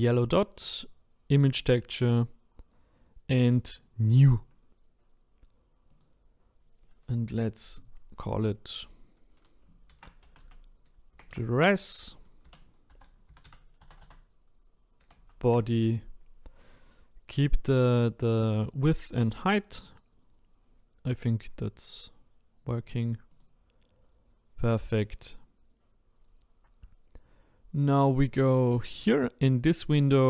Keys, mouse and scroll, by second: 1.3-3.5 drag, 3.5 scroll down 5.